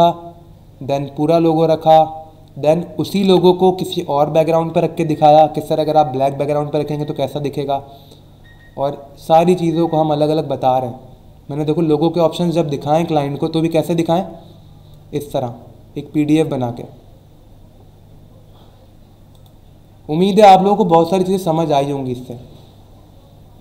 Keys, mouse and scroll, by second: 1.4-2.0 scroll down 2, 7.2 scroll down 1, 8.2-10.2 scroll down 5, 15.0 scroll down 1, 15.5-16.0 scroll down 2, 16.7 scroll down 1, 18.1-18.5 scroll up 2, 19.3 click.